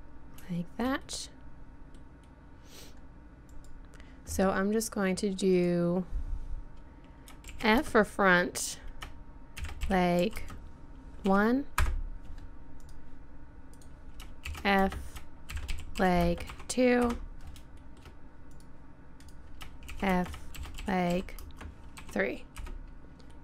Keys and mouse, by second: 0.7-2.5 middle drag, 2.6 middle click, 6.5-12.8 middle drag, 12.8-13.8 right drag, 13.8-17.8 middle drag, 18.6 click, 19.2 middle click, 20.4-21.7 drag, 21.7-23.3 middle drag.